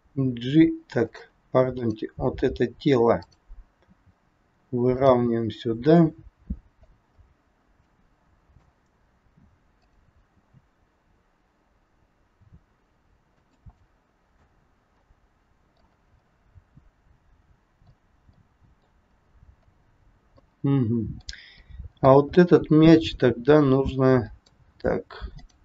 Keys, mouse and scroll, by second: 1.6 click, 3.2 click, 3.8 g, 5.4 middle click, 7.3 scroll up 2, 7.8 middle click, 9.8 click, 10.4 g, 13.9 middle click, 18.4 middle click, 18.4 scroll up 1, 19.4 scroll down 1, 20.4 middle click, 20.4 scroll down 1, 22.4-23.1 scroll up 5, 24.5 middle click, 25.3 click.